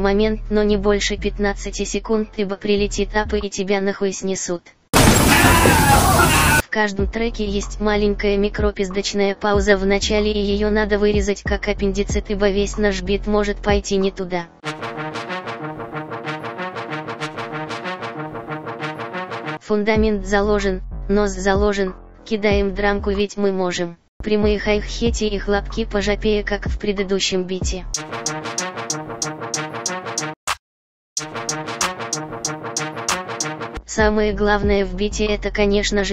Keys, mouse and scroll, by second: 34.9 F7.